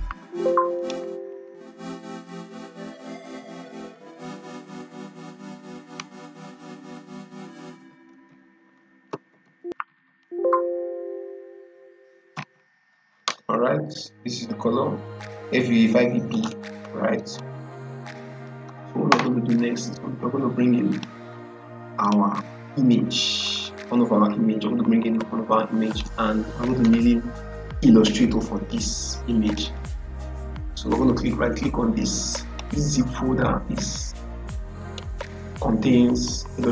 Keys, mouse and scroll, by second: 0.7 click, 1.7 ctrl+a, 2.5-4.1 typing, 6.6-9.8 typing, 12.2 b, 16.2-20.8 drag, 25.8 click, 29.4 click, 32.4 click, 34.7 right click.